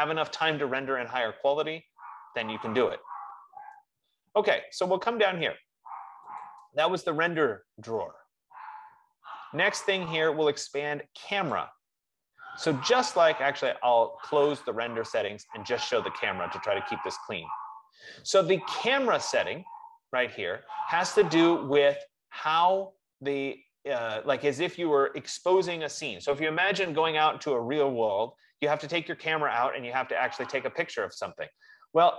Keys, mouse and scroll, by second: 6.6 click, 7.7 click, 11.8 click, 14.0 click, 18.0 click.